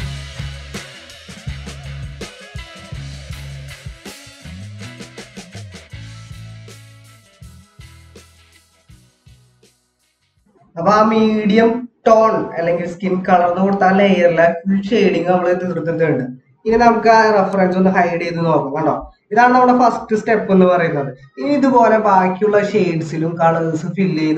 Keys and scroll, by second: 19.2 ctrl+-.